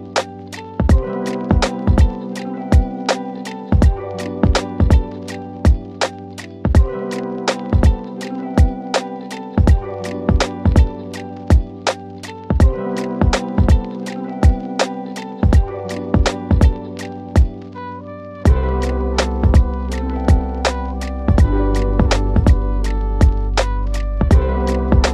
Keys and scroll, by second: 13.3 F3, 19.9 KP_Add.